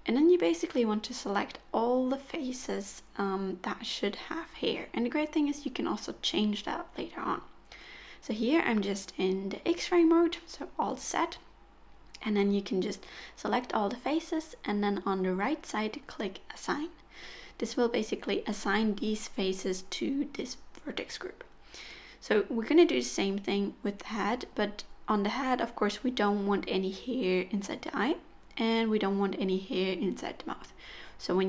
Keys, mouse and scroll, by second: 1.5 middle click, 2.5 alt+z, 3.2 KP_1, 5.3 click, 6.5 shift+click, 7.2 shift+click, 8.1 click, 9.3 shift+click, 10.4 shift+click, 11.2 shift+click, 12.1 shift+click, 12.9 shift+click, 13.6 middle click, 16.0 click, 16.8 middle click, 18.6 middle click, 22.8 click, 24.3 middle click, 25.3 KP_1, 26.4 u, 27.0 z, 28.9 alt+z, 29.1 middle click, 29.9-30.4 scroll down 1, 30.4 3, 31.0 middle click.